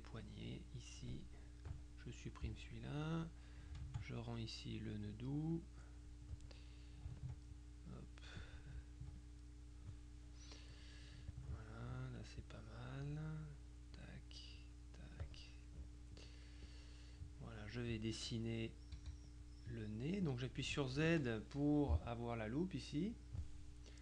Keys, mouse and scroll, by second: 0.6 click, 1.8 click, 2.5 Delete, 3.1 click, 3.9 ctrl+click, 5.6 click, 7.3 ctrl+click, 9.3 ctrl+click, 11.4 ctrl+click, 12.5 click, 13.5 click, 14.7 click, 16.7 click, 19.1 z, 19.5 click.